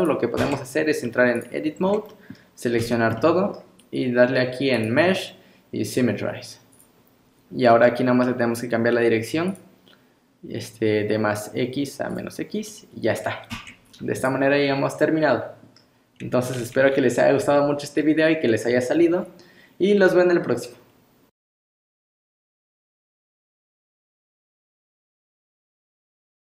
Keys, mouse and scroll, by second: 0.0 click, 0.4 Tab, 1.0 scroll down 3, 1.4 click, 1.7 scroll up 2, 2.1 middle click, 2.8 a, 3.2 middle click, 4.8 click, 9.5 click, 12.7 middle click, 13.5 Tab, 13.9-14.3 scroll down 2, 14.2 click, 14.6-15.0 scroll up 2, 15.0 middle click.